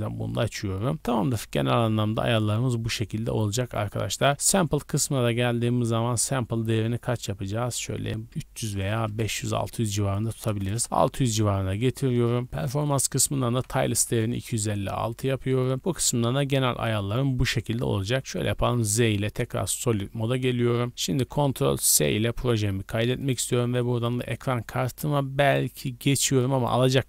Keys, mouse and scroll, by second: 0.5-1.0 scroll up 4, 0.9 click, 1.5 scroll down 2, 1.8 scroll up 2, 3.4-4.0 scroll up 3, 4.1-10.7 drag, 10.6 KP_0, 11.1 scroll down 2, 12.4-12.8 scroll down 8, 12.8-14.1 drag, 14.6 scroll down 2, 15.8-16.2 scroll down 8, 16.2 scroll up 2, 17.5-18.2 scroll up 10, 18.3 z, 19.6 scroll down 2, 20.2-20.6 scroll up 3, 21.2-22.2 scroll up 3, 22.2 ctrl+s, 23.2-24.0 drag, 25.4-26.9 drag.